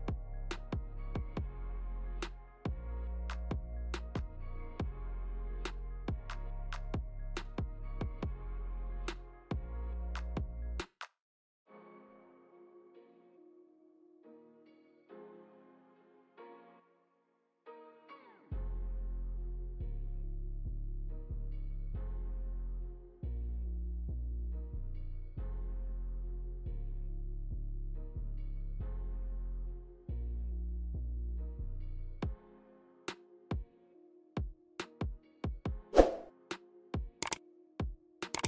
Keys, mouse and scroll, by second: 0.0 g, 2.2 g, 4.6 middle click, 6.1 g, 7.6 middle click, 8.5 click, 9.0 click, 9.9-10.3 scroll down 6, 10.3 shift+middle click, 11.3 click, 12.4 middle click, 12.6 scroll down 2, 12.7 middle click, 13.8 shift+click, 14.6 ctrl+z, 15.0 click, 16.9 click, 18.3 middle click, 19.1 scroll up 4, 19.2 shift+middle click, 19.5 middle click, 19.7 click, 20.2 click, 20.5 middle click, 21.1 click, 21.7 click, 23.1 click, 23.5 middle click, 25.3 shift+d, 30.0 click, 30.7 shift+middle click, 31.4 click, 31.7 middle click, 34.5 click, 34.5 scroll down 1, 36.0 g, 37.7 middle click, 38.4 scroll down 3.